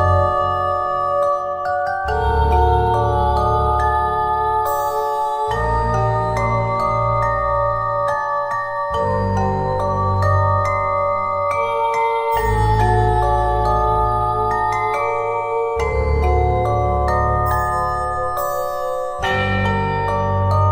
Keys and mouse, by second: 1.0 Tab, 10.5 Tab, 18.6 ctrl+Tab, 20.1 x.